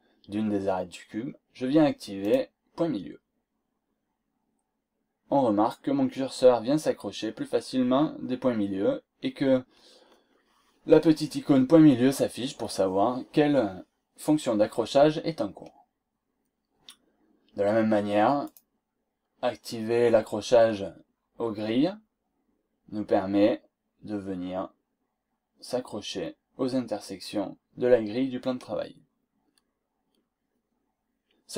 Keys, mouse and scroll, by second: 2.2 click, 18.4 click, 20.4-20.9 scroll down 2, 21.1 scroll up 2.